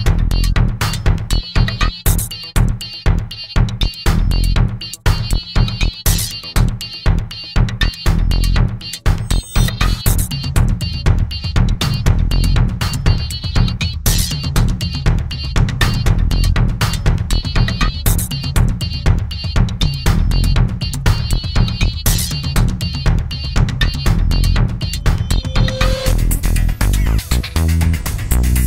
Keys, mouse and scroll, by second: 0.6 shift+click, 1.3 shift+click, 2.6 shift+click, 5.7 click, 10.2 click, 14.5 alt+9, 15.3 alt+9, 17.1 alt+9, 24.2 click, 26.4 click, 27.4 shift+click, 28.2 shift+click.